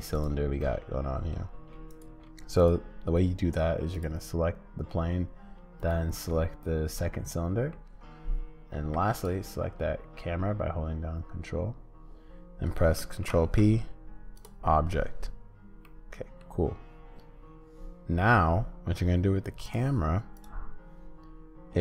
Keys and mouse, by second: 0.6 middle click, 1.9 shift+click, 7.2 middle click, 13.2 ctrl+p, 15.9 middle click, 19.6 click.